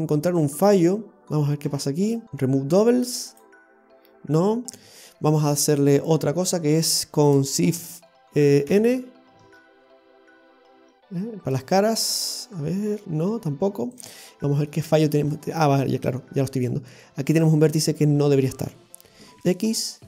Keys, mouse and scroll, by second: 1.7 Tab, 2.2 scroll down 1, 3.4 w, 4.8 Tab, 5.3-6.2 scroll down 1, 6.2 Tab, 6.2-7.6 scroll down 1, 8.7 shift+n, 11.9 scroll up 2, 13.0 ctrl+n, 14.0 click, 14.4 scroll down 1, 14.8 shift+middle click, 14.8 scroll up 2, 15.4 shift+middle click, 17.4 right click, 19.4 x.